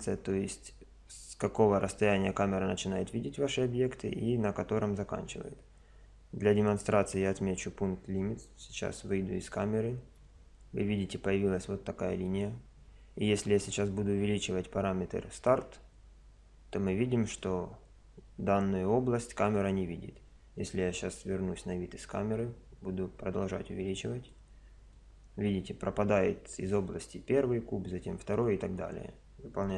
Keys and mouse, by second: 7.3 click, 8.8 KP_0, 9.5-13.7 middle drag, 13.7 click, 21.0 KP_0, 22.4 click, 24.9 click.